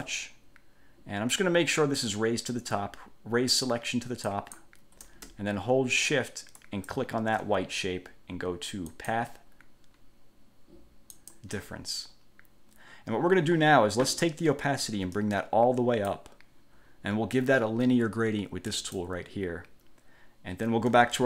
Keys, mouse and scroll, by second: 4.5 click, 6.8 shift+click, 9.1 click, 11.3 click, 15.3 click, 18.9 click.